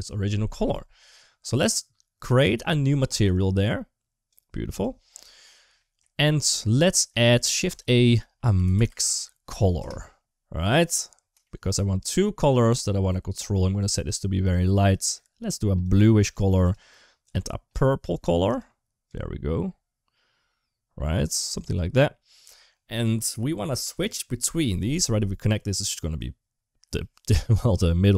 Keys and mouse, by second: 2.9 click, 4.1-4.6 drag, 5.6 middle click, 6.8 middle click, 7.1 shift+a, 11.2 shift+middle click, 11.8 click, 24.0-24.8 drag, 25.6-26.0 drag.